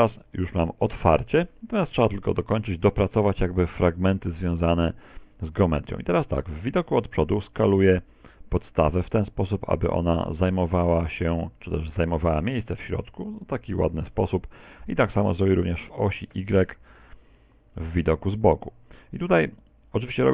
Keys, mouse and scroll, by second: 0.3 e, 2.3 click, 3.9 KP_1, 4.7 z, 13.0 click, 16.2 KP_1, 18.7 s.